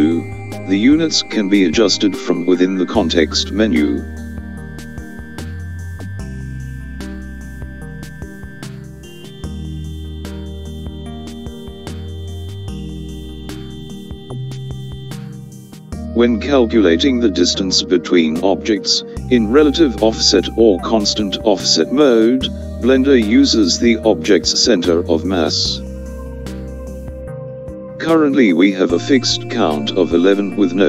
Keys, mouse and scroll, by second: 1.9 click, 4.8 click, 12.1 click, 16.1 click.